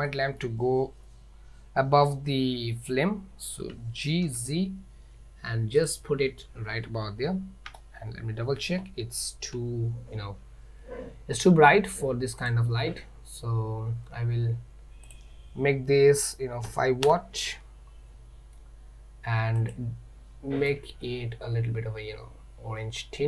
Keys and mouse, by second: 0.1-0.5 middle drag, 3.8 g, 7.3 z, 12.5 click, 15.2-17.7 drag, 19.6 click.